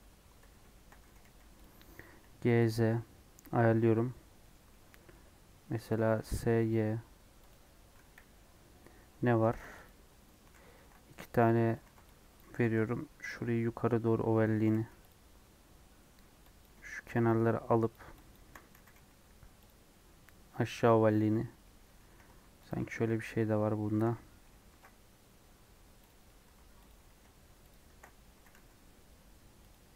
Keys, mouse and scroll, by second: 0.7 shift+middle click, 1.0 g, 1.7 scroll up 3, 2.1 s, 3.4-4.4 scroll up 1, 4.4 middle click, 4.5 scroll up 1, 4.7-6.1 middle drag, 6.1 s, 8.0 KP_1, 9.0 Tab, 9.5 ctrl+r, 10.7 ctrl+r, 11.8 alt+z, 12.3 click, 12.4 g, 14.6 g, 16.6 click, 17.9 shift+click, 18.8 g, 21.6-22.6 middle drag, 22.6 alt+click, 24.1 middle click, 24.6 ctrl+r, 26.8 alt+click, 27.7 alt+shift+click, 28.3 g.